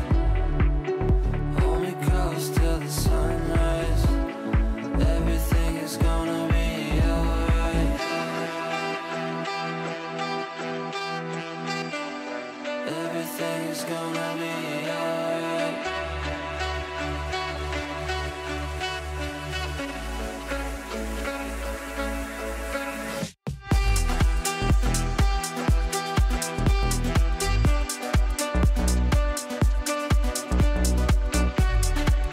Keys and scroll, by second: 23.4 Delete.